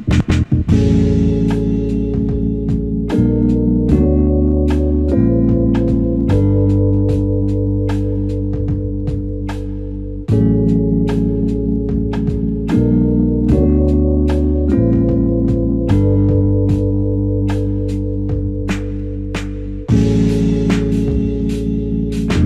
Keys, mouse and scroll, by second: 1.6 alt+click, 8.4 alt+click, 11.5 ctrl+z, 11.9 ctrl+z, 13.3 ctrl+z, 14.5 alt+shift+click, 15.1 alt+click, 17.1 typing, 18.0-18.4 scroll down 1, 18.4-19.1 scroll up 1, 19.1 typing.